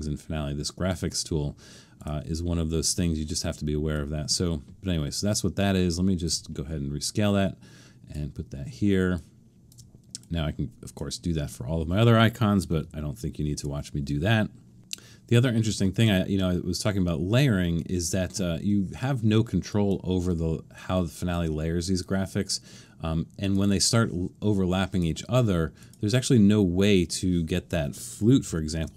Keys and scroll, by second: 12.8 super+-, 28.4 super+=, 28.8 super+=.